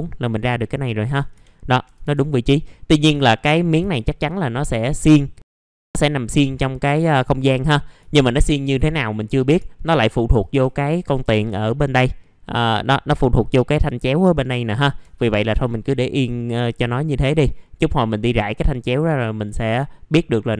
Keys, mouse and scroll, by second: 0.6-1.0 scroll down 1, 1.5-1.8 scroll down 1, 2.5 middle click, 3.8 1, 4.2 click, 10.4 click, 16.2 right click, 17.2 click.